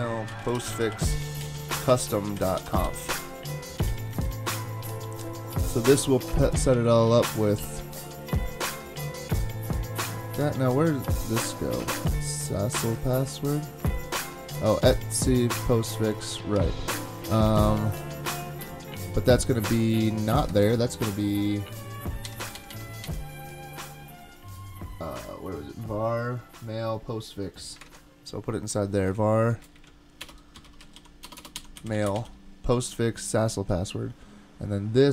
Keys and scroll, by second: 0.0-4.6 typing, 20.5 super+Tab, 22.4 Up, 22.5 Up, 22.7 Up, 23.0 Up, 27.8 super+Tab, 29.7 alt+Right, 30.2 alt+BackSpace, 30.4-32.6 typing.